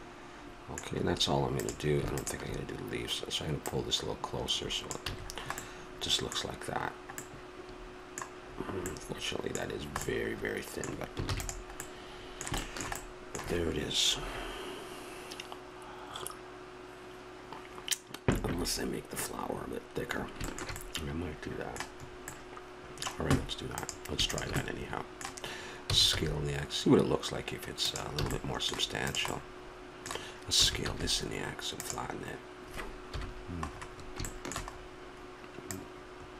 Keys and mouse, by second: 1.5-6.0 drag, 5.1 a, 6.0-11.3 middle drag, 11.3 ctrl+s, 19.5-23.7 middle drag, 23.7-25.9 drag, 25.9 s, 28.2 a, 28.5 middle click, 29.1-30.7 drag, 33.1 KP_1, 33.7-35.6 middle drag, 35.6 click.